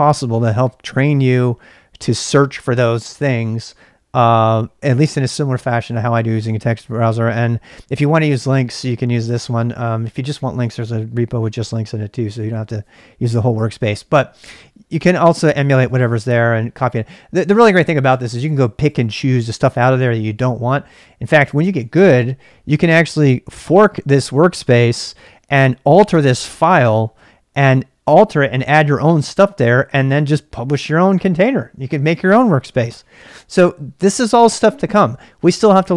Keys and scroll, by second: 21.6 super+Tab.